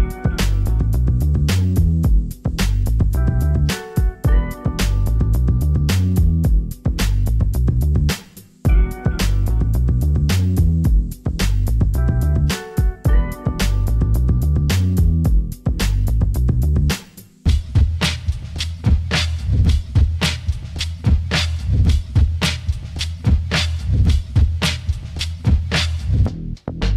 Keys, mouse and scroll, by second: 10.2-11.8 middle drag, 13.4 middle click, 17.4-19.5 middle drag.